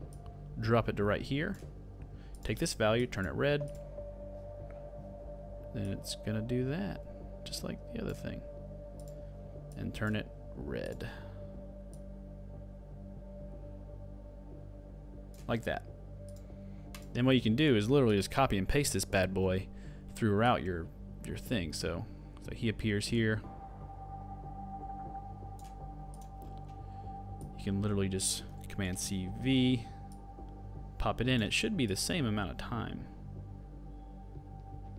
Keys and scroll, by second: 28.8 super+c, 29.0 super+v.